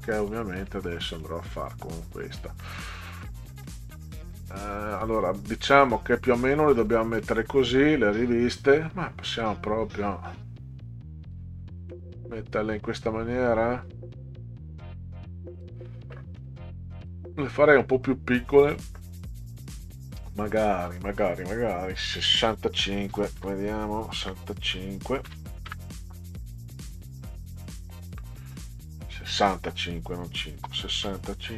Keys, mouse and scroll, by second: 0.0 click, 1.2 middle click, 2.0 click, 2.4 middle click, 3.6-5.0 drag, 7.2 middle click, 8.7 click, 9.4-11.3 drag, 11.9 middle click, 12.8-13.8 drag, 14.8 click, 16.1 middle click, 16.9 click, 17.6 middle click, 21.0 click, 21.7 click, 24.2 BackSpace, 25.2 5, 25.7 Return, 30.7 6, 31.0 5.